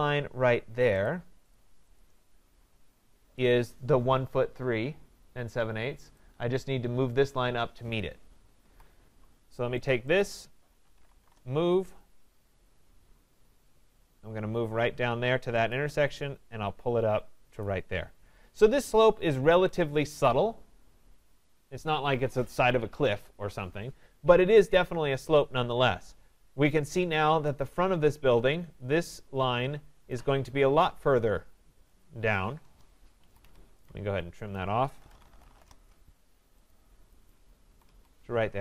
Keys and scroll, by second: 19.5 Escape, 32.7 Return, 33.2 Escape, 35.6 Return, 37.7 Escape.